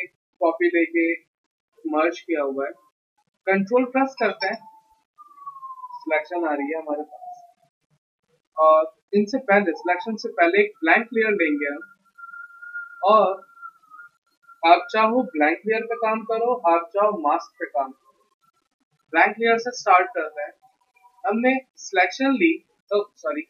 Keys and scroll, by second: 9.6 ctrl+d, 22.9 Escape.